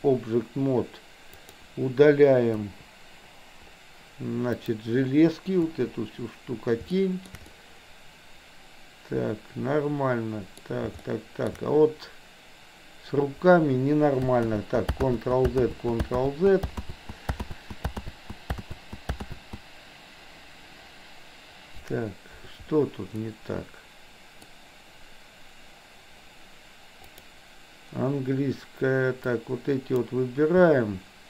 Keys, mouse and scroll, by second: 1.4 click, 2.7 Delete, 4.7 click, 5.7 Delete, 6.9-7.3 shift+middle drag, 7.4-10.6 middle drag, 11.1-11.4 shift+middle drag, 14.4 ctrl+z, 15.1 ctrl+z, 15.7 ctrl+z, 16.3 ctrl+z, 16.8 ctrl+z, 17.4 ctrl+z, 18.1 ctrl+z, 18.6 ctrl+z, 19.2 ctrl+z, 23.2-24.4 middle drag, 27.1 click, 29.3-30.1 drag.